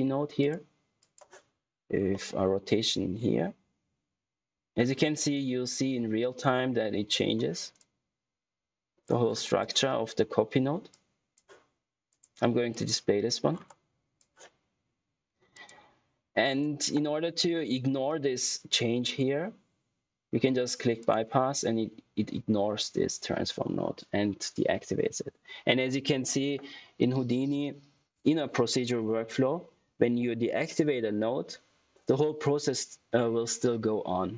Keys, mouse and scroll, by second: 0.3 click, 2.0 middle click, 7.7 click, 9.2 scroll down 1, 9.3 click, 13.4 scroll down 1, 13.6 click, 20.9 click.